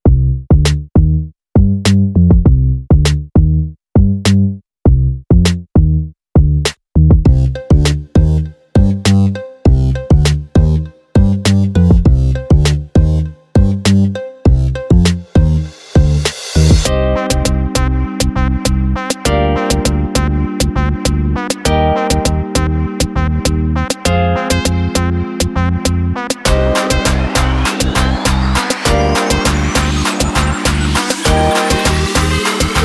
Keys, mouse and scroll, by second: 0.1 click, 4.1 click, 7.9 click, 8.5 click, 9.6 click, 10.3 click, 10.7 click, 11.6 click, 12.3 click, 13.4 click, 14.2 click, 14.5 click, 14.8 click, 15.8-24.1 drag, 27.1 click, 27.7 click.